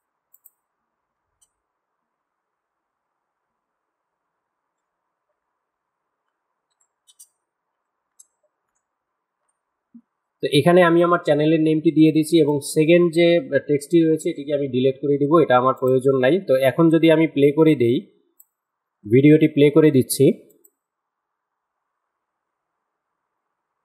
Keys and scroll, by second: 1.2 u, 2.6-7.8 typing, 12.6 Delete.